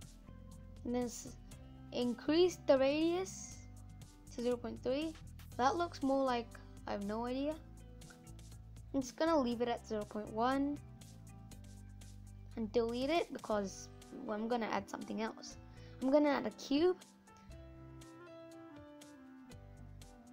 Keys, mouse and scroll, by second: 0.4-3.9 drag, 4.6 middle click, 5.4 scroll down 1, 5.6-8.7 middle drag, 8.7 click, 12.0 Delete.